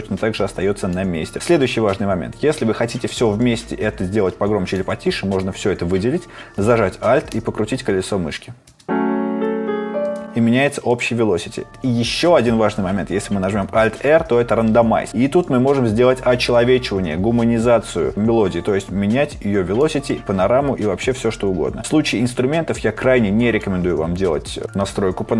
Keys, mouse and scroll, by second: 13.7 alt+r.